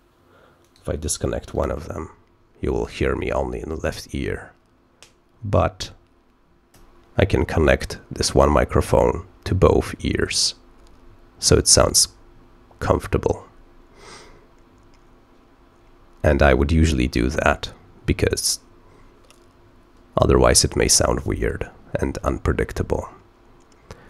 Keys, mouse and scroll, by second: 0.5 right click, 1.5 click, 5.7 click.